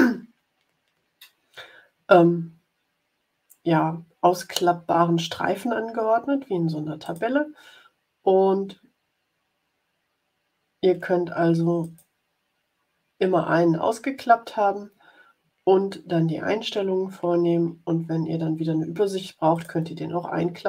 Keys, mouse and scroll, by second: 6.9 click, 11.7 click, 19.5 click.